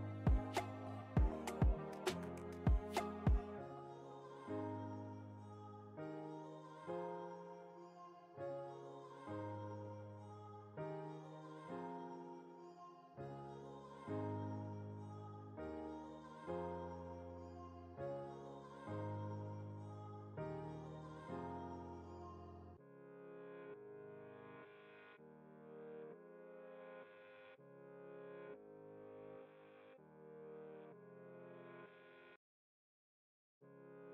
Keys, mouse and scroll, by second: 0.0-1.9 typing, 3.1 click, 5.6-7.4 typing, 8.3 click, 9.0 alt+scroll up 1, 10.1 click, 13.4-14.5 typing, 16.2 click, 18.5 click, 20.2-21.5 typing, 21.8 Return, 23.7-26.5 drag, 24.0 typing, 26.5 ctrl+t, 27.7 click, 28.7 ctrl+z, 29.7-31.5 drag, 31.5-34.1 alt+shift+drag.